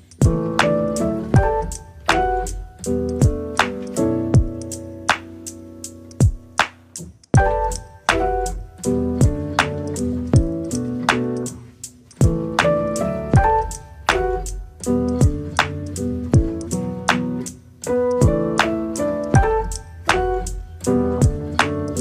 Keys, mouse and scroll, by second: 0.6 g, 1.7 s, 4.1 g, 5.5 g, 11.6 s, 13.2 g, 16.4-17.6 middle drag.